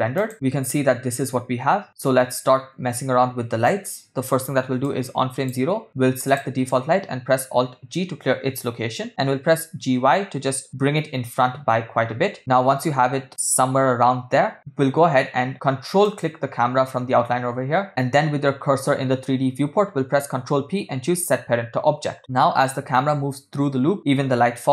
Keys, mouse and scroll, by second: 2.4 space, 3.2 space, 5.1 click, 6.3 click, 8.0 alt+g, 9.5 g, 16.1 ctrl+click, 20.4 ctrl+p, 22.7 space.